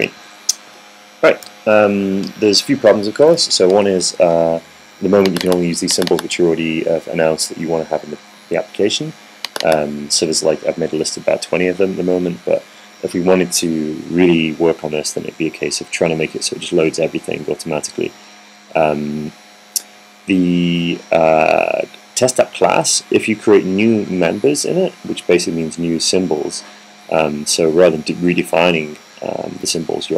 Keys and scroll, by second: 0.9 Up, 1.0 Up, 2.3 Down, 2.5 Down.